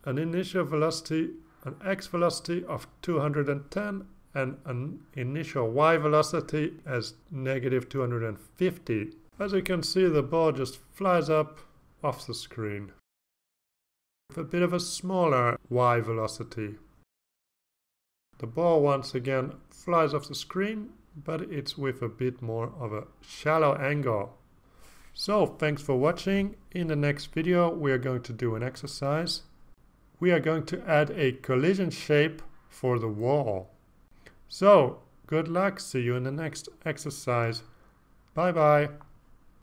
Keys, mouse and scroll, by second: 0.4 click, 2.0-3.3 typing, 3.3 Return, 4.3 click, 6.4-7.6 typing, 8.0 Return, 9.7 click, 10.8 click, 13.7 click, 14.5 click, 15.0 click, 15.2 click, 16.0-17.1 typing, 18.1 click, 20.9 click, 24.2 click, 28.0 click, 29.3 click.